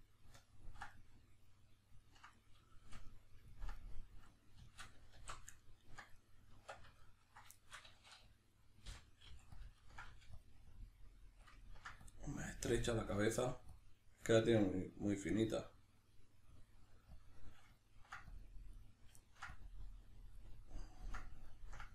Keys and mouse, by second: 5.2 alt+q, 6.1 right click, 6.5 Tab, 7.2-9.6 middle drag, 9.6 ctrl+click, 10.1 middle click, 10.4 click, 11.6 ctrl+middle click, 12.0 click, 13.8 click, 17.8 ctrl+middle click, 18.3 click, 19.2 ctrl+middle click, 19.6 click, 20.7-21.9 ctrl+middle drag.